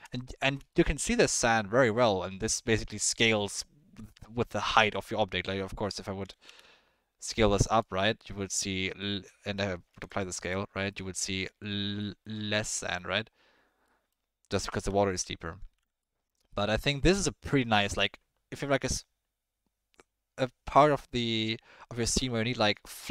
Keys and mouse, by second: 0.7 shift+middle drag, 6.2 s, 7.9-8.6 middle drag, 9.9 ctrl+a, 10.9 drag, 11.1 middle drag, 12.0 click, 12.6-13.0 drag, 13.8-14.1 drag, 15.0 ctrl+z, 15.7 ctrl+z, 16.0-16.5 drag.